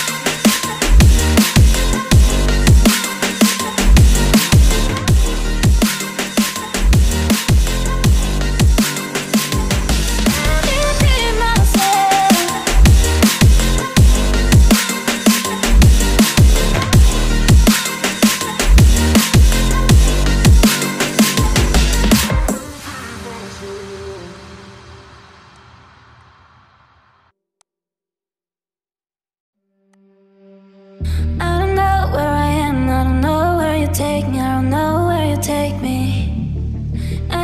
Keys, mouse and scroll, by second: 8.9 ctrl+click, 13.1 ctrl+click, 15.2 ctrl+z, 16.6 ctrl+z, 17.8 right click, 19.8 ctrl+click, 21.8 ctrl+click, 25.5 ctrl+click, 26.2 ctrl+click, 29.2 right click.